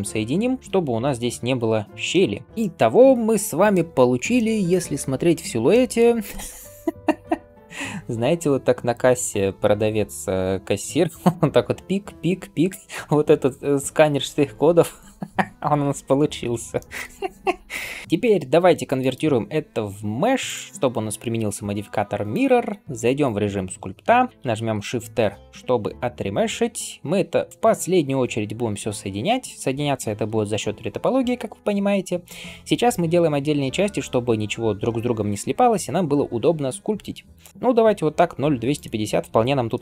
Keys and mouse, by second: 0.6-15.1 middle drag, 0.9 Tab, 16.5 shift+middle click, 18.0-26.5 drag, 18.0-26.5 middle drag, 18.9-26.5 right drag, 24.8 shift+r.